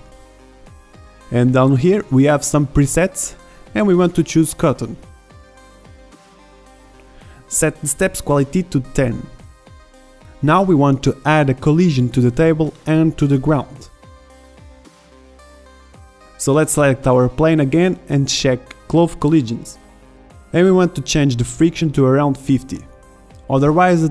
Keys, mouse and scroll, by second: 9.4 middle click, 10.0-10.6 drag, 10.6-12.2 right drag, 11.7-12.4 drag, 13.8 middle drag, 15.5-16.8 drag, 18.2-24.1 drag.